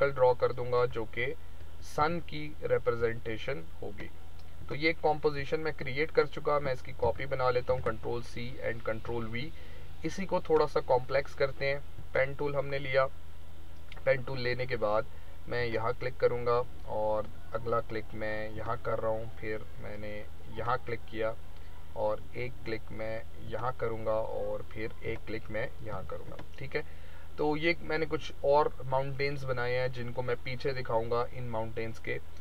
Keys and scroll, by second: 1.9 v, 7.0 ctrl+c, 7.6 ctrl+v, 26.0 v.